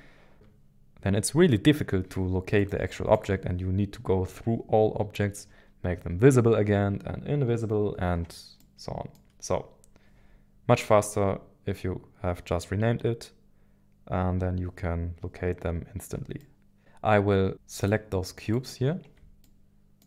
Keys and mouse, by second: 8.6 middle click, 16.4 middle click, 17.7 shift+click, 19.4 middle click.